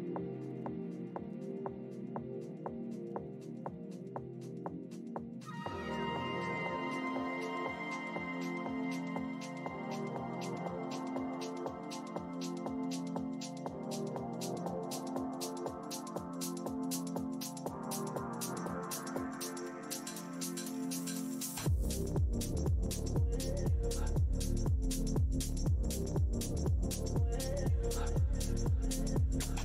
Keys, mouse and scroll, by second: 1.8-3.1 typing, 3.4-4.8 scroll down 1, 6.5 z, 9.1 shift+v, 10.4 click, 11.7 shift+click, 12.5-13.2 typing, 16.8 click, 17.2 scroll down 1, 17.9-19.8 scroll down 1, 17.9 w, 21.6 click, 21.9 w, 23.9 space, 25.0 click, 25.7 scroll down 1, 26.4 scroll, 27.2 click, 27.9-28.4 scroll up 1, 28.7 click, 28.8 w, 29.4 shift+v.